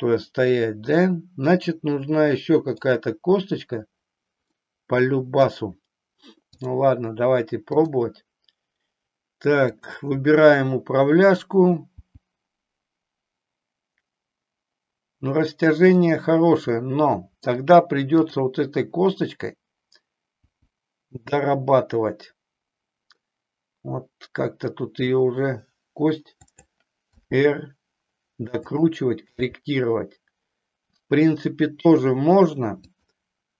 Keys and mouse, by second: 4.5-5.5 middle drag, 6.6 click, 9.6-11.4 drag, 12.0 g, 16.1 click, 16.9 middle click, 18.2 click, 20.4 g, 27.2 r, 28.7 click, 29.4 g, 32.0 click, 32.9 click.